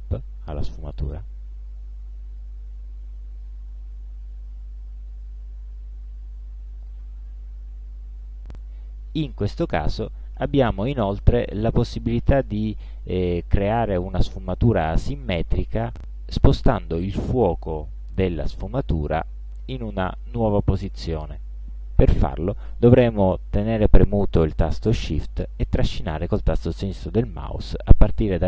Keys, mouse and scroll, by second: 2.5-3.7 drag, 5.3-7.1 drag, 7.9 click, 13.2-15.5 ctrl+shift+drag, 17.8-20.5 shift+drag, 23.9 click, 25.8 click, 27.8 click.